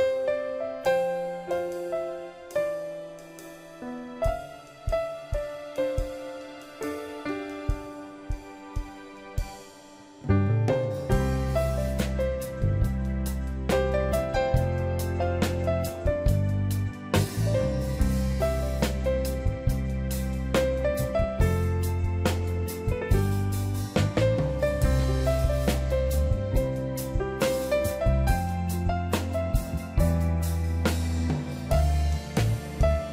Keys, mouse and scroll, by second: 0.0 ctrl+j, 10.0 double click, 11.6 double click, 22.8 ctrl+=, 29.1 ctrl+d, 30.3 ctrl+j, 32.2 shift+click.